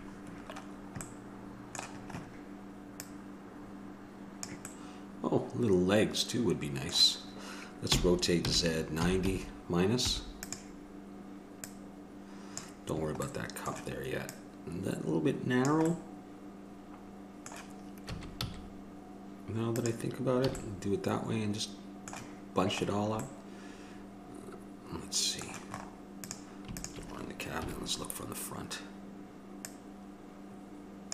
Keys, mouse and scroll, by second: 0.1 KP_Decimal, 2.3-6.6 middle drag, 6.6 click, 12.6 click, 13.5 middle click, 16.2-19.3 middle drag, 20.7 a, 20.9 middle click, 21.4 click, 21.5 middle click, 21.6 click, 21.7 middle click, 21.8 click, 23.1-24.2 drag, 24.2-25.5 middle drag, 25.9 middle click, 26.4-27.8 drag, 27.8 KP_1, 29.9-31.1 drag.